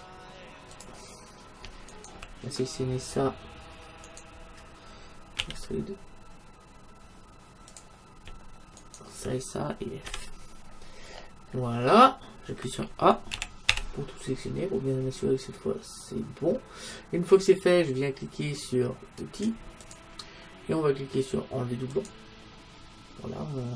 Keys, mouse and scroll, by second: 0.9-2.8 drag, 1.9-3.7 right drag, 4.1-6.0 right drag, 5.4 e, 8.8-10.6 right drag, 10.1 f, 10.8 middle click, 13.4 a, 13.7 a, 17.2-19.9 middle drag, 19.9-21.8 drag, 22.0-23.7 drag.